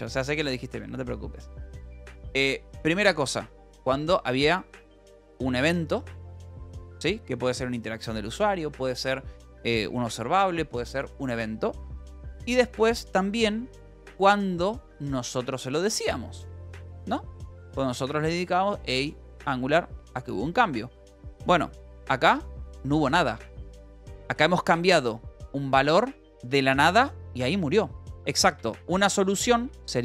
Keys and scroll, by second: 22.3 k, 22.6 Escape, 24.7 shift+v, 28.5 Escape, 29.4-30.0 typing.